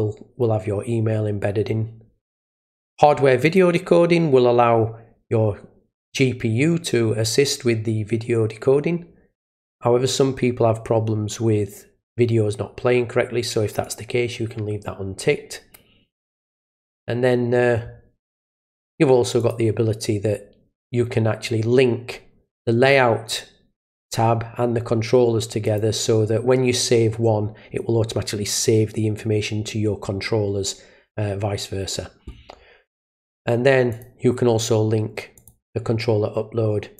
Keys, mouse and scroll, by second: 3.5 click, 13.8 click, 19.4 click, 25.6 click, 33.9 click, 35.4 click.